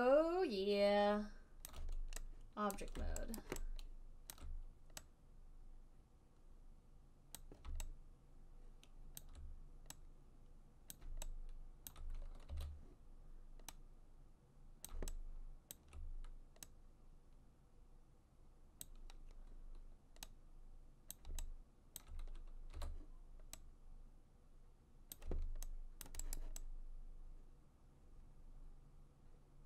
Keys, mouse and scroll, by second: 1.9 alt+click, 3.1 right click, 3.7 alt+right click, 4.6 alt+right click, 7.7 click, 9.5 alt+click, 11.2 click, 12.2 alt+click, 12.9 e, 15.2 click, 16.1 alt+click, 19.2 click, 22.3 alt+click, 23.0 w, 25.5 click, 26.4 alt+click, 26.7 alt+click, 28.2 alt+click, 28.2 alt+right click.